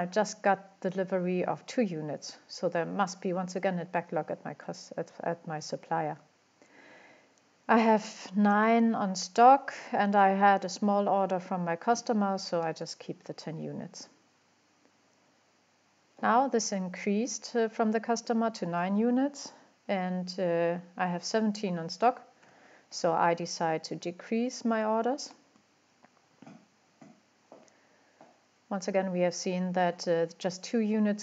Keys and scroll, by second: 22.4 5.